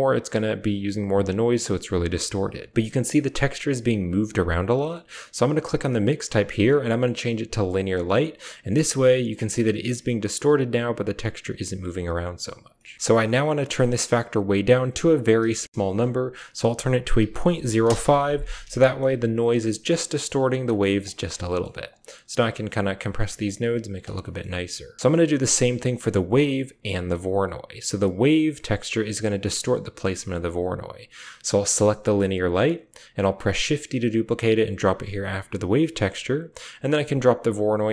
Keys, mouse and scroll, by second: 0.5 click, 1.4 click, 2.7 click, 4.5 click, 5.2-7.6 drag, 8.6-11.4 drag, 15.1-17.3 drag, 17.3 middle click, 18.6 shift+middle drag, 20.5 middle click, 20.9 click, 21.0-23.9 typing, 21.3 click, 21.6 click, 21.8 click, 22.6 click, 22.8 click, 23.2 click, 23.7 middle click, 24.2 middle click, 24.9 click, 25.1 middle click, 26.0 click, 26.9 click, 28.0 click, 30.0 drag, 31.5 click, 33.2 shift+d, 34.9 click, 35.9 click, 36.6-37.8 drag.